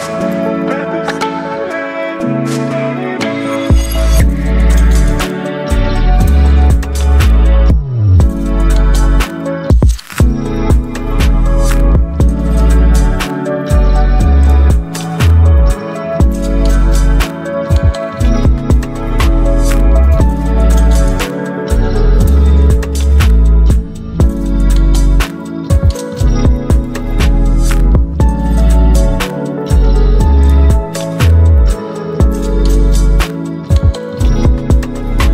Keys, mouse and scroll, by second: 5.1-19.3 drag, 20.0 click, 22.5-25.9 shift+drag, 27.0 click, 27.0 alt+scroll up 1, 27.8 space, 27.8-35.3 drag.